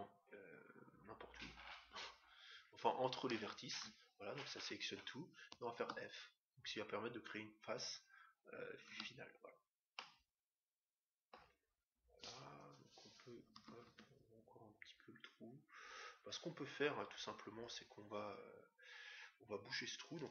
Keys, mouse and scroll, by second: 5.7 f, 8.9 Tab, 9.5-11.8 middle drag, 13.5 s.